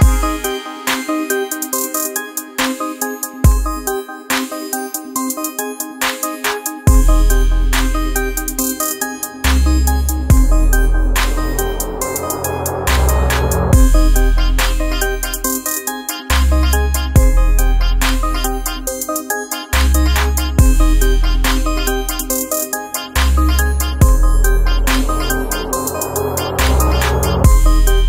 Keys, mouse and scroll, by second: 1.6 Right, 3.7 click, 4.4 Right, 6.4 click, 7.6 ctrl+space, 7.7 ctrl+click, 8.1 ctrl+space, 9.6-13.9 drag, 14.4 alt+scroll down 1, 14.9 space, 15.1 click, 15.5 space, 17.7-24.7 drag, 24.7 alt+scroll down 1, 25.1 space, 25.3 click, 25.6 space, 25.9-28.0 ctrl+drag.